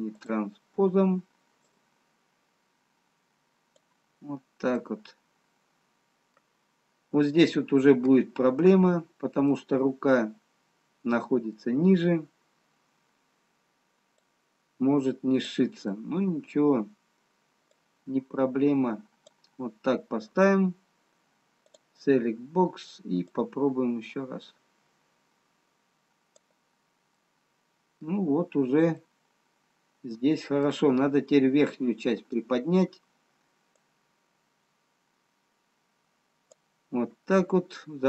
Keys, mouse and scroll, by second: 0.1 click, 2.6 click, 5.4 middle click, 7.9 scroll up 2, 10.0 middle click, 13.6-14.6 scroll down 3, 14.6 click, 17.6 middle click, 18.6 click, 21.9 click, 23.7 click, 27.6 middle click, 28.8-29.2 scroll up 3, 29.5 middle click, 33.3 scroll down 2, 34.7 click.